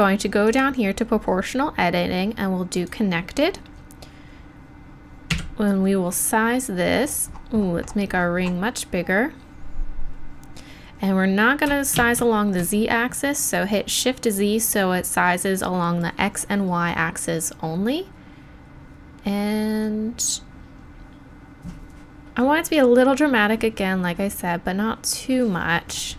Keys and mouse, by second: 5.3-8.6 middle drag, 5.3 s.